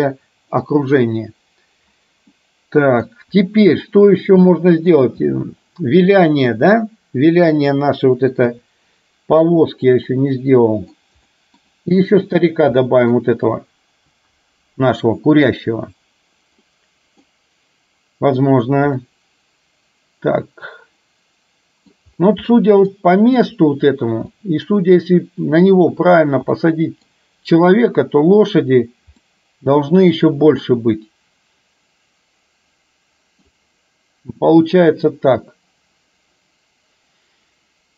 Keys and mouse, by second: 2.4-3.1 middle drag, 3.9-5.1 middle drag, 8.6 KP_7, 10.1-10.9 middle drag, 11.4 middle click, 12.9 middle click, 16.7 middle click, 19.1-22.1 middle drag, 22.7 middle drag, 24.4 middle drag, 26.6-27.1 middle drag, 29.3-33.6 middle drag.